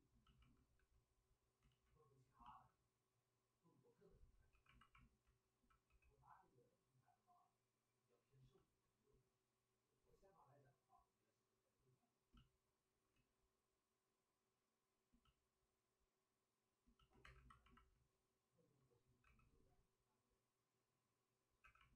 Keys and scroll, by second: 0.8 w, 1.6 ctrl+z, 4.5 2, 5.8 w, 18.9-19.7 typing, 21.6 2.